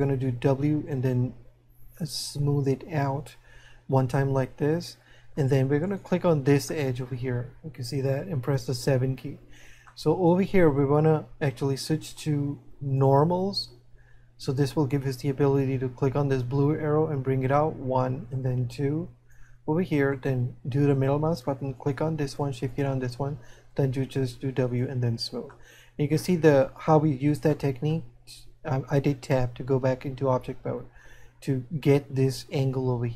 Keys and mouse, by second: 0.2 w, 4.1 middle click, 6.8 middle click, 10.1 middle click, 11.9 click, 17.8 click, 20.6 middle click, 25.8 middle click.